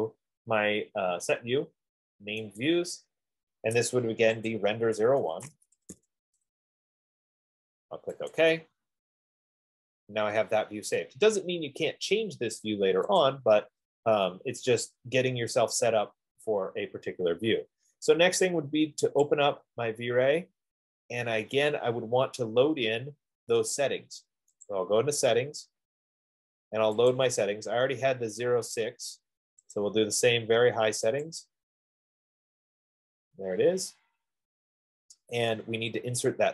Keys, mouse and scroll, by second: 2.9 click, 4.9 click, 5.6-6.8 typing, 8.7 click, 12.7 click, 13.7 click, 17.7 click, 19.5-24.2 drag, 23.6 F15, 25.1 click, 27.5 click, 30.1 click, 31.6 click.